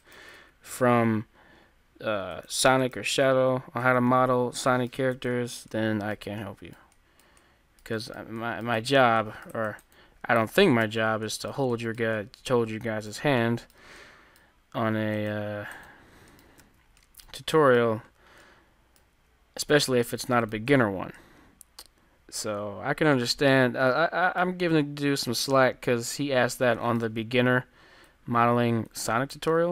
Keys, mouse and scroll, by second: 0.2 g, 2.5 g, 3.2 g, 4.5 g, 5.1 a, 5.4 Tab, 5.7-7.7 middle drag, 7.5 click, 8.3-9.3 drag, 10.5 middle click, 10.9 ctrl+z, 13.5-15.3 drag, 16.3-20.3 middle drag, 16.7 ctrl+z, 19.6-22.3 drag, 20.9-23.1 middle drag, 24.6-27.0 middle drag, 28.2-29.7 drag, 29.3 ctrl+z.